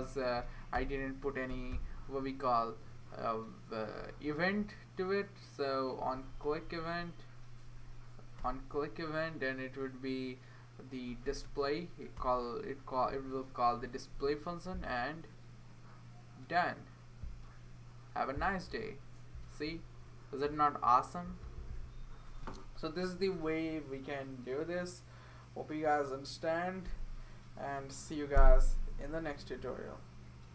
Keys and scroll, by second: 0.7-2.2 typing, 4.6 Down, 6.0 Down, 6.1 Down, 6.3 Down, 6.5 Down, 6.7 Down, 7.8 Up, 8.4 Return, 10.8-11.9 typing, 12.2 Return, 13.2-14.0 typing.